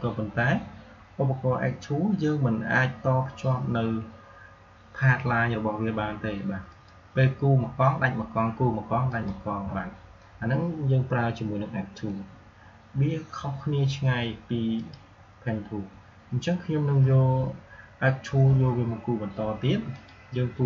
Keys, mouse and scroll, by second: 6.6 click, 9.0 click, 11.9 Delete, 14.6 click, 19.8-20.6 drag.